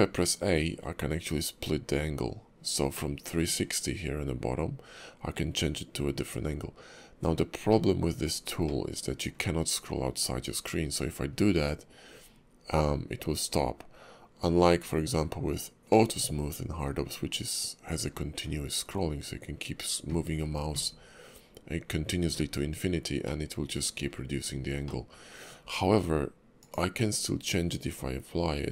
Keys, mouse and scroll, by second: 3.1 middle click, 7.7 middle click, 9.0 shift+middle click, 16.1 middle click, 23.3 middle click, 24.8 middle click, 27.3-27.9 scroll up 1.